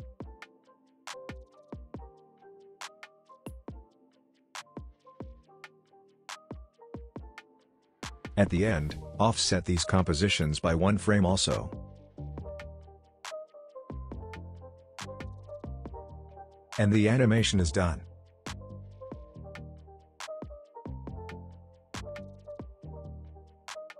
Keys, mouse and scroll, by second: 2.7 u, 4.2 click, 4.4 u, 4.7 click, 4.9 u, 5.2 click, 5.2 click, 5.4 u, 5.8 click, 6.3 alt+scroll up 1, 6.8 click, 8.2 shift+click, 8.9 shift+click, 9.4-10.0 drag, 11.1 click, 13.8-14.7 shift+click, 15.5 click, 16.8 space, 18.8 space, 19.8-20.4 drag, 22.7 space.